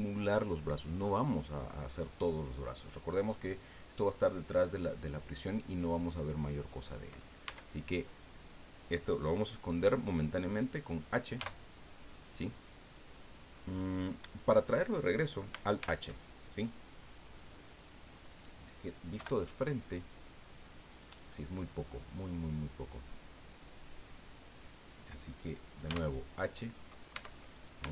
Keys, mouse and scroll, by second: 7.4 Tab, 7.8 right click, 11.3 h, 15.8 alt+h, 19.2 KP_1, 25.9 h, 27.1 Tab, 27.5 right click, 27.8 Tab.